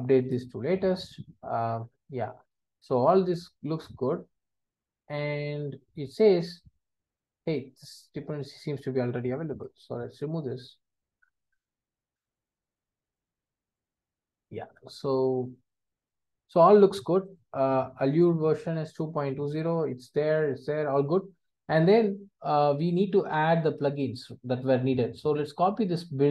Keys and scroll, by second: 0.5 Return.